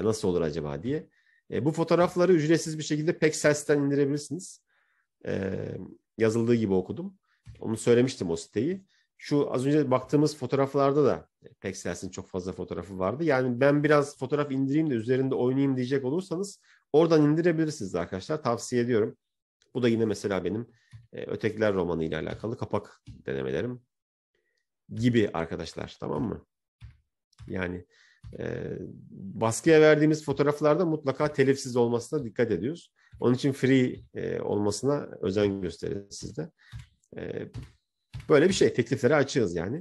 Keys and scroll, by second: 22.4 Right, 23.8 Right, 25.1 Right, 26.7 Right, 27.2 Right, 28.3 Right, 29.6 Right, 30.4 Right, 31.2 Right, 32.2 Right, 33.0 Right, 33.8 Right, 35.4 Right, 36.1 Right, 36.6 Right, 37.6 Right, 38.1 Right, 39.0 Right.